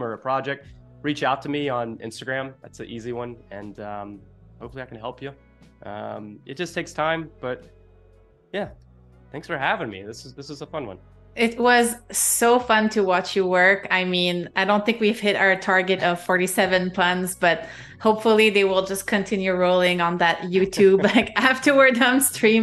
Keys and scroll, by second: 7.5 space, 8.7 space.